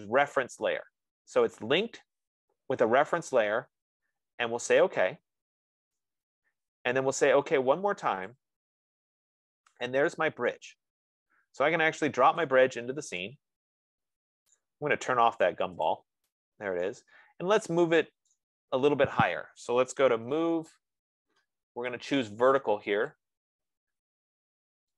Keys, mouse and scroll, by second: 1.5 F15, 5.3-8.3 drag, 8.9 click, 12.8 click, 14.9 right click, 16.2 click, 18.0 click, 18.8-20.5 right drag, 20.3-21.2 typing, 21.1-22.3 right drag, 23.5 click.